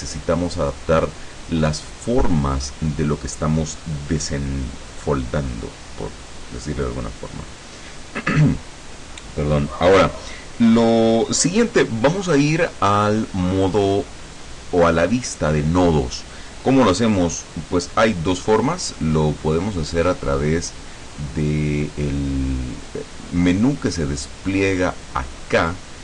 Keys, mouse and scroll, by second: 0.1 click, 1.9 click, 19.7 click.